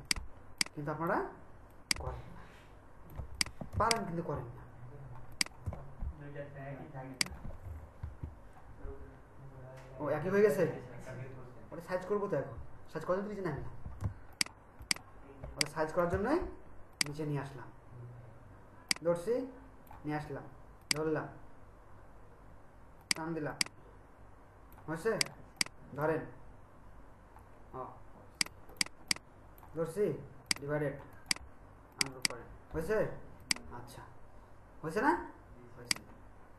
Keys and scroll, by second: 3.7 ctrl+alt+shift+space, 8.0 BackSpace, 14.1 ctrl+space.